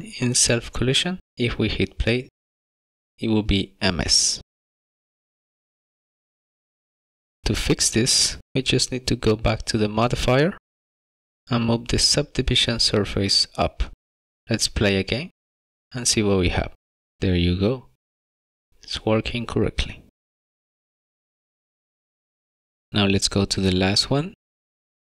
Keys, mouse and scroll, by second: 3.5 click, 7.4 click, 11.3 click, 13.4 click, 14.4 middle click, 14.4 scroll up 2, 14.9 click, 18.1 click, 20.4 click, 21.0 Tab, 21.0-21.4 scroll down 6, 21.4 middle click, 22.0 scroll up 3, 22.2 scroll down 1, 22.3 scroll down 5, 22.4 shift+middle click, 23.4-23.9 scroll up 6, 24.2 shift+middle click.